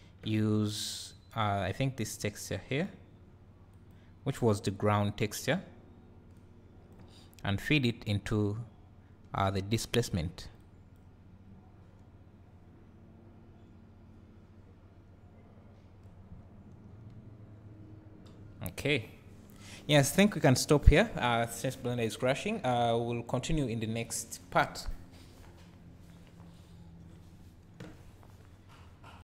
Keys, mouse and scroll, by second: 1.8-4.4 drag, 6.4 click, 7.8-29.3 drag, 16.4 scroll up 2.